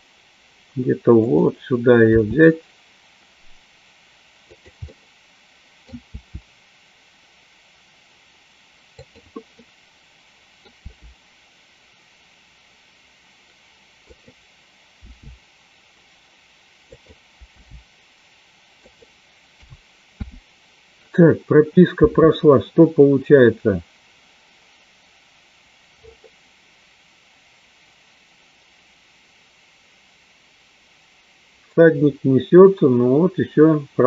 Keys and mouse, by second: 0.0 g, 1.8 click, 2.4 r, 5.1 middle click, 6.4 r, 9.8-10.8 middle drag, 11.1 r, 15.0 g, 17.3 click, 17.7 g, 19.9 a, 20.5 i, 22.2 space.